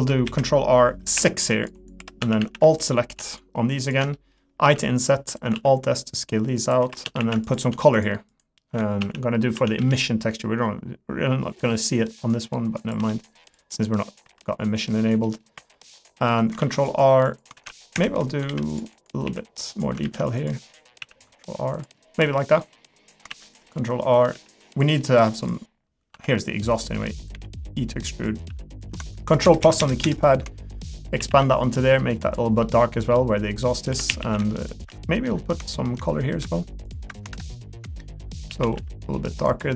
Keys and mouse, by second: 0.2 ctrl+r, 2.0 3, 2.2 a, 3.3 shift+click, 3.8 shift+click, 4.1 middle click, 4.6 i, 5.5 alt+s, 6.8 3, 7.0 a, 7.4 alt+click, 7.9 shift+click, 9.8 g, 13.0 g, 13.7 middle click, 14.2 3, 14.4 middle click, 14.8 middle click, 15.2 middle click, 16.2 middle click, 16.6 r, 17.5 ctrl+click, 18.5 ctrl+r, 19.2 s, 20.0 ctrl+r, 21.0 s, 22.0 middle click, 22.5 middle click, 23.3 ctrl+r, 24.3 s, 25.0 middle click, 25.2 3, 25.4 click, 26.1 i, 27.3 e, 28.5 s, 31.2 a, 31.4 g, 32.6 middle click, 33.6 middle click, 33.9 3, 34.1 a, 34.6 shift+click, 35.2 middle click, 38.5 a, 38.7 g.